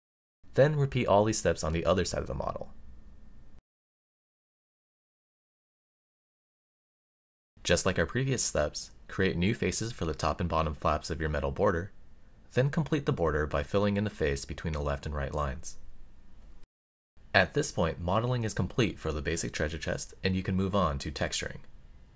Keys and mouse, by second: 2.2 middle click, 4.4 right click, 5.4 middle click, 7.4 middle click, 9.5 right click, 11.3-12.5 middle drag, 14.3 middle click, 17.5-20.8 middle drag.